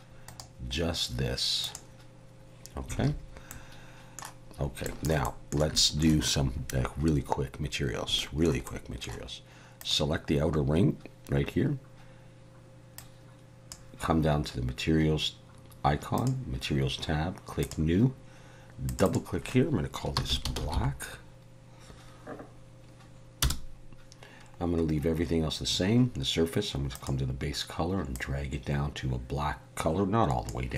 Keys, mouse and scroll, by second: 0.2 right click, 3.0 alt+a, 3.5 middle click, 4.6 scroll up 1, 4.8 shift+middle click, 5.2 middle click, 5.7 shift+middle click, 8.2 middle click, 8.6 middle click, 9.8 click, 13.0 click, 16.2 click, 17.6 click, 18.9 click, 19.1 click, 26.9 click.